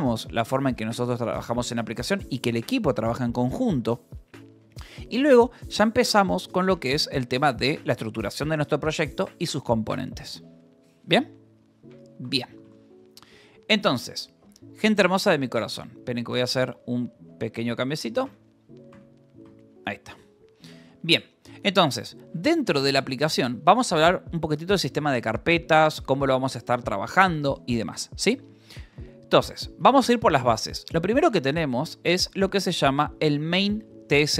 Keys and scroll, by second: 1.3 k, 7.0 Return, 7.2-9.6 typing, 12.1 j, 13.0 o, 13.4 Return, 15.2 Escape, 16.2 Escape, 16.7 space, 16.9 b, 17.2 q, 18.1 n, 19.9-23.2 typing, 25.2 Escape, 25.4 space, 26.7 n, 27.1 j, 28.8 Return, 29.7 j, 30.0 k, 30.6 Return, 31.2-32.8 typing, 33.9 g.